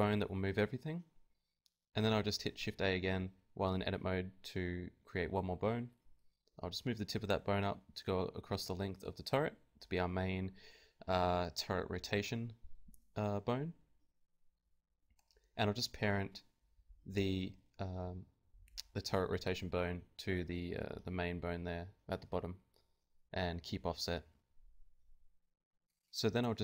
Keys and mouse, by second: 0.3-1.3 drag, 1.3 shift+a, 2.1-3.9 drag, 3.9-5.1 right drag, 4.3 g, 5.3 middle click, 5.7 click, 5.7 right click, 5.7 g, 7.3 click, 8.0 Tab, 8.3-11.2 drag, 10.7 b, 12.8 click, 13.3 ctrl+Tab, 14.2 ctrl+p, 15.8-18.2 drag, 15.8 r, 17.0 Tab, 18.2 g, 18.6-21.9 drag, 19.2 g, 21.9 ctrl+p, 22.4 Tab, 22.9-25.4 drag, 22.9 r, 23.5 ctrl+Tab, 23.8 ctrl+Tab, 24.1 r, 25.0 ctrl+Tab.